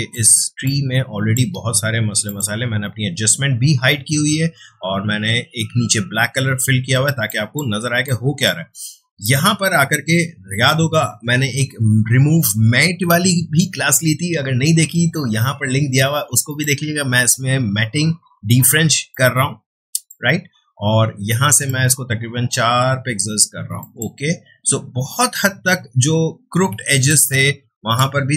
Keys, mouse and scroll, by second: 0.6-2.2 ctrl+drag, 7.1 space, 7.2 click, 7.6 space, 8.0 click, 8.2 space, 9.2 click, 16.4 click, 19.1-21.5 drag, 22.1-22.5 scroll up 1, 23.8 click, 26.8 space, 27.0-28.3 ctrl+drag.